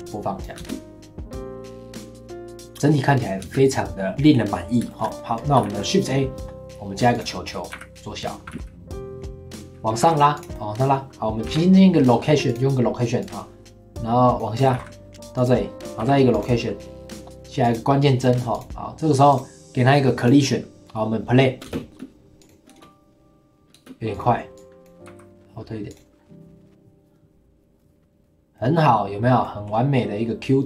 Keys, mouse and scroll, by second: 0.6 space, 3.4 space, 3.6-4.9 drag, 4.9-5.3 shift+middle drag, 5.3 scroll down 1, 5.6 shift+a, 7.4 middle click, 7.7 s, 8.4 g, 9.6 click, 10.0 g, 10.5-11.5 middle drag, 11.5 i, 13.2-14.7 drag, 14.7 g, 16.0 i, 17.6 click, 18.2-18.5 middle drag, 18.5 click, 19.3 click, 20.2-21.7 drag, 21.7 space, 21.8 middle click, 21.9 space, 22.4 click, 22.7 space, 23.7 space, 24.1 click, 25.0 g, 27.2-28.5 drag, 28.5-30.6 middle drag.